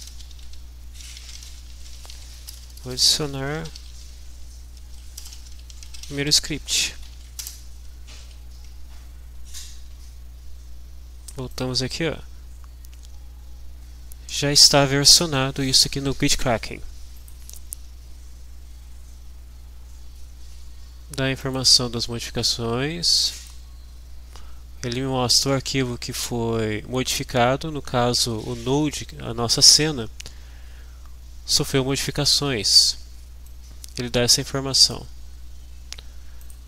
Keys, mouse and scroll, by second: 0.0-7.1 typing, 7.4 shift+Return, 11.5 click, 17.1 click, 23.3 click, 33.5 click, 34.5 click, 36.5 click.